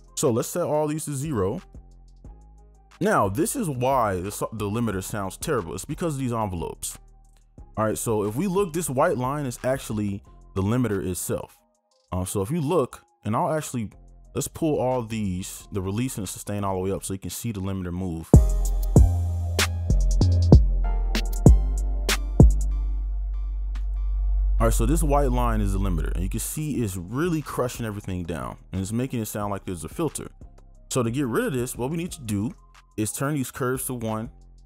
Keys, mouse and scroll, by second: 0.2 right click, 18.3 space, 22.7 space, 33.3 scroll down 1.